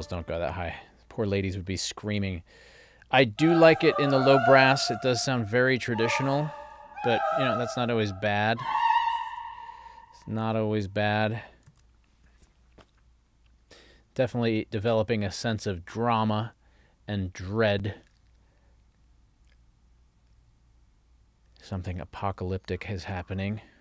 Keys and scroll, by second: 11.8 super+s.